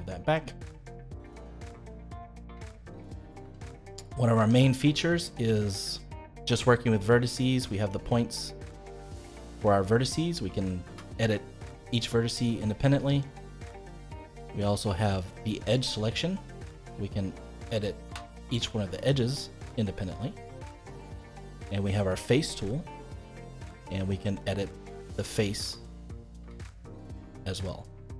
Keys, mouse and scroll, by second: 1.2 scroll down 1, 1.5 middle click, 2.1-2.6 scroll up 2, 2.6 shift+middle click, 3.0 scroll up 1, 3.4 Tab, 3.9 middle click, 4.4 Tab, 4.9-7.7 middle drag, 7.7 click, 8.4-10.8 middle drag, 10.8 g, 14.6-15.7 drag, 18.0 g, 21.3-23.3 middle drag, 23.3-25.1 drag, 25.5 middle click, 26.4 g.